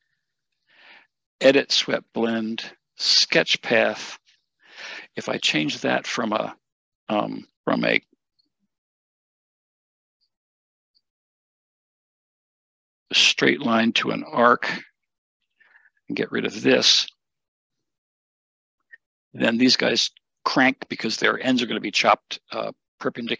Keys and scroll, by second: 15.2 Escape, 15.3 Escape, 17.0 BackSpace.